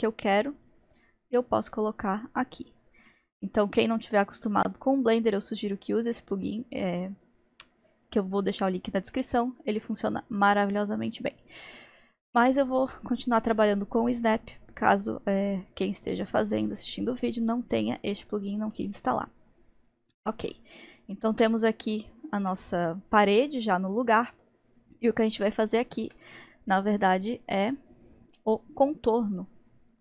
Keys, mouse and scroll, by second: 3.1-6.1 middle drag, 11.3-13.1 drag, 18.7-27.3 middle drag, 27.3-30.0 drag.